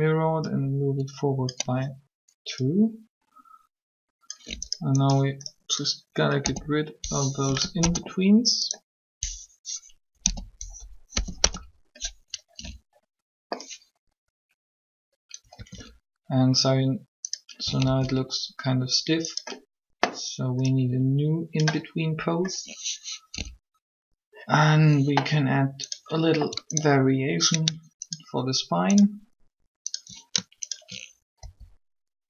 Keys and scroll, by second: 6.3 k, 7.5 Delete, 7.7 Return, 10.0 k, 11.0 Delete, 11.2 Return, 15.5 alt+a, 17.7 alt+a, 31.4 shift+r.